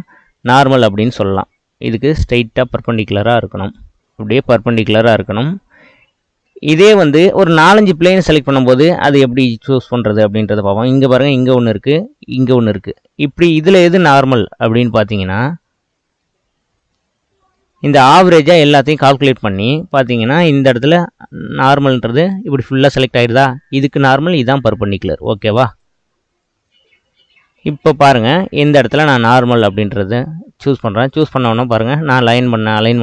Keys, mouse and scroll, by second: 0.4-2.5 drag, 3.5 ctrl+z, 4.0-5.2 drag, 5.2-8.2 middle drag, 9.9 click, 11.7 middle click, 12.4 shift+click, 12.9-14.8 middle drag, 14.8 click, 16.2-19.3 middle drag, 20.6-26.6 drag, 26.6-28.8 middle drag, 28.8-30.7 drag, 30.7-33.0 middle drag.